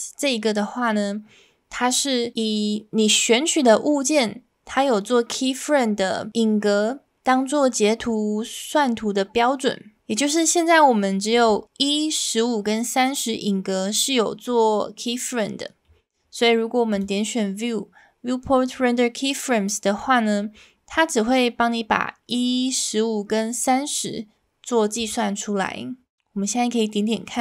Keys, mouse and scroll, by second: 16.9-20.6 drag, 25.1-27.4 drag.